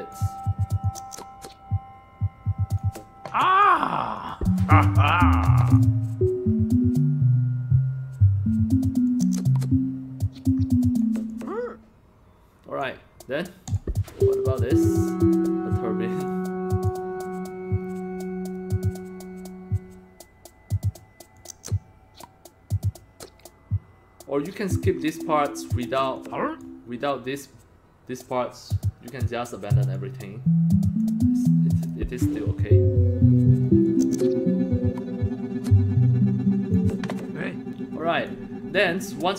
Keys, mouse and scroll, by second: 0.8-2.8 drag, 3.4 drag, 4.2 click, 5.5 click, 9.0-11.0 drag, 11.3-12.8 drag, 13.7 click, 16.3 click, 21.3-25.8 drag, 26.2 click, 29.9-31.0 drag, 31.8 click, 33.8-36.7 drag, 37.1-38.3 drag, 38.7 scroll up 1.